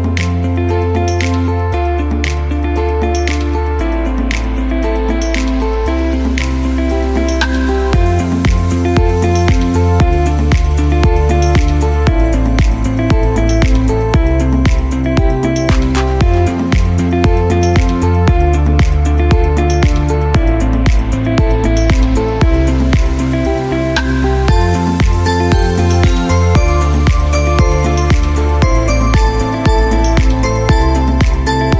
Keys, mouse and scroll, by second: 4.7 click, 9.1-12.1 drag, 15.4 click, 23.7 click, 23.8 click, 24.6-25.8 typing, 27.7 0, 28.5 click, 29.3-30.7 typing.